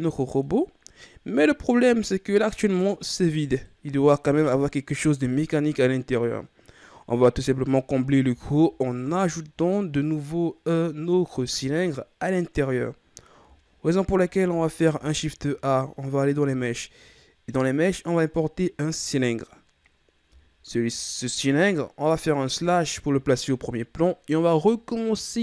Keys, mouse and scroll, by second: 0.8-1.4 scroll up 2, 1.7-6.6 middle drag, 8.2 KP_1, 14.7 shift+a, 20.4-21.6 shift+scroll up 2, 22.5 KP_Divide.